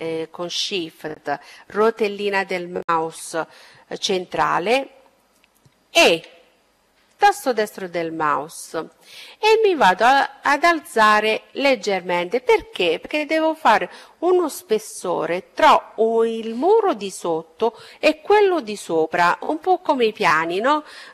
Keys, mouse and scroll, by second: 3.8 e, 6.6-8.5 drag.